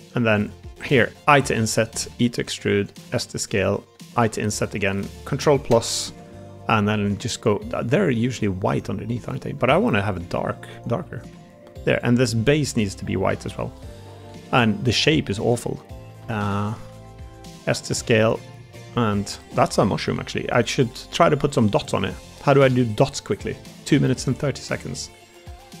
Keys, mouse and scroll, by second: 1.2 i, 2.0 e, 2.7 click, 2.9 s, 4.1 i, 5.3 ctrl+KP_Add, 6.0 ctrl+KP_Add, 6.6 a, 6.8 g, 8.6 click, 9.5 g, 11.2 Tab, 12.5 Tab, 13.4 l, 14.0 a, 14.2 g, 15.9 2, 16.1 a, 16.2 a, 16.8 s, 18.3-19.6 middle drag, 19.8 middle click, 20.2 Tab, 20.8-21.5 middle drag, 21.6 Tab, 22.6 3, 22.8 click, 23.1 middle click, 23.9 middle click, 25.1 middle click.